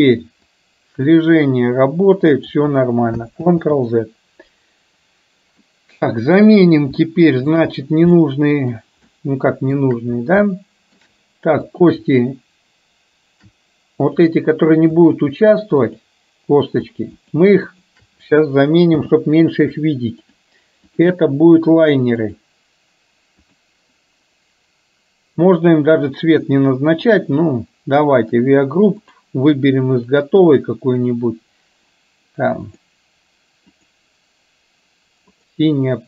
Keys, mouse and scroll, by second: 0.8-2.8 drag, 3.5 ctrl+z, 5.7-6.5 middle drag, 7.0-7.7 shift+middle drag, 8.3-8.9 middle drag, 9.2 shift+click, 9.3 shift+middle click, 10.5-11.0 shift+middle drag, 14.0 click, 15.8 click, 17.3 shift+click, 17.7-18.0 shift+drag, 19.0 n, 20.3 click, 21.2-22.5 drag, 23.4-24.0 drag, 27.0 click, 28.3 click, 30.5 click, 35.3 click.